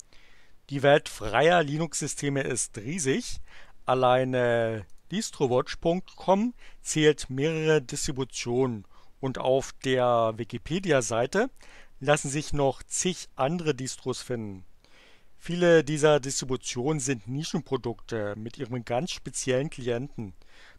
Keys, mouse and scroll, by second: 4.8 click, 10.6 click.